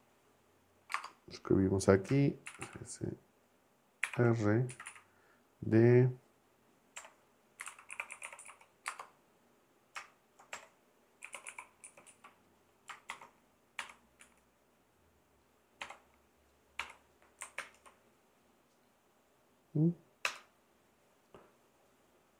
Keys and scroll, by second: 0.9 space, 2.5 shift+s, 4.0 shift+r, 4.7 Right, 6.9-9.0 typing, 10.5-13.8 typing, 14.2 Right, 15.8 =, 16.8 0, 17.6 ctrl+Return, 20.2 Return.